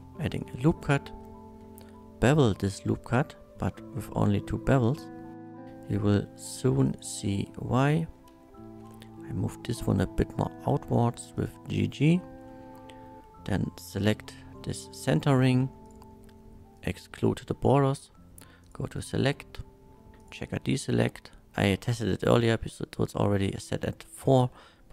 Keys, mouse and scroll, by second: 0.0 ctrl+r, 0.2 click, 0.7 right click, 1.6 ctrl+b, 2.9-4.0 middle drag, 6.9 click, 7.4 2, 7.8 click, 8.8 g, 9.2 g, 10.2 g, 11.4 click, 12.4 3, 13.8 alt+3, 13.8 alt+click, 15.2 2, 15.8 alt+shift+click, 16.8 click, 18.6 alt+shift+click, 20.2 click.